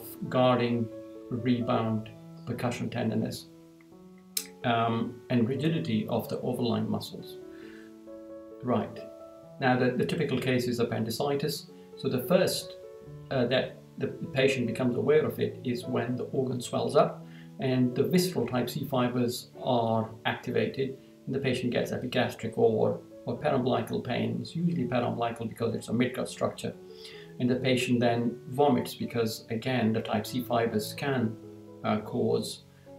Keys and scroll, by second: 8.3 Down.